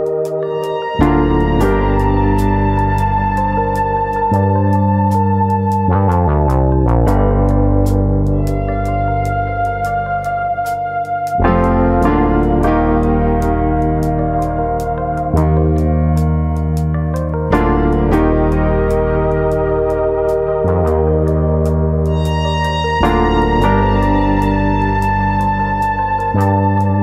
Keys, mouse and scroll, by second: 0.7 3, 0.8 click, 1.1 middle click, 1.5 shift+click, 1.8 middle click, 2.9 click, 5.6 click, 7.0 middle click, 7.5 click, 8.3 click, 9.1 middle click, 9.9 click, 10.3 shift+click, 10.7 shift+click, 10.7 middle click, 11.2 shift+click, 11.5 shift+click, 11.7 middle click, 12.4 click, 13.4 click, 15.3 middle click, 16.3 shift+middle click, 16.3-16.9 scroll up 1, 16.9 click, 17.6 click, 20.0 click, 21.1 middle click, 22.2 click, 24.2 click, 24.2 2, 25.1 click.